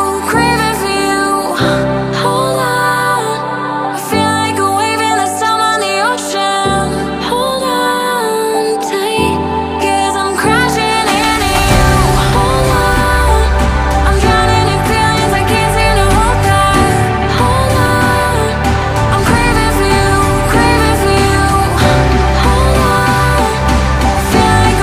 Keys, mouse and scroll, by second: 4.3 ctrl+z, 6.2 ctrl+z, 14.7 double click, 15.8 ctrl+click, 16.1 right click, 17.8 ctrl+click, 18.0 right click, 19.5 ctrl+click, 19.8 right click, 21.5 ctrl+click, 21.7 right click, 23.7 ctrl+click, 24.0 right click.